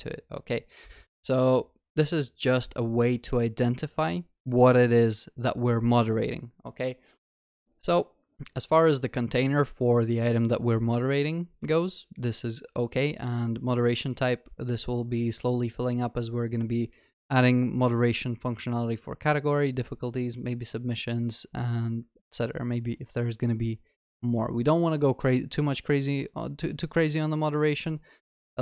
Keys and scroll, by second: 2.9 ctrl+s.